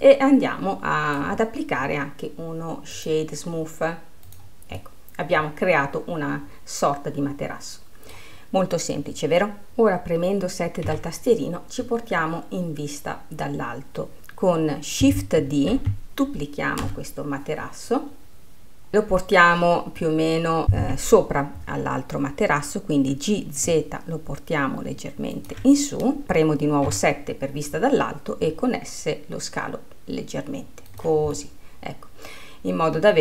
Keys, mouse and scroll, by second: 0.0-1.6 middle drag, 1.6-3.1 scroll up 2, 3.1-5.0 drag, 5.0-11.2 middle drag, 12.5 scroll, 16.0 shift+d, 20.2-23.3 middle drag, 23.3 g, 25.5 z, 28.6 s, 31.2 s, 31.6-33.2 middle drag.